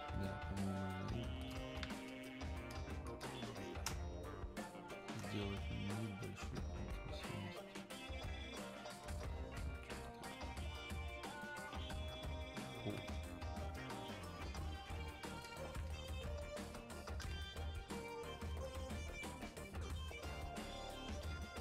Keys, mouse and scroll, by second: 0.2 click, 3.9 space, 4.4 click, 4.6 space, 5.8-17.4 drag, 17.4 space, 17.8 click, 17.9 space, 20.1-21.6 drag.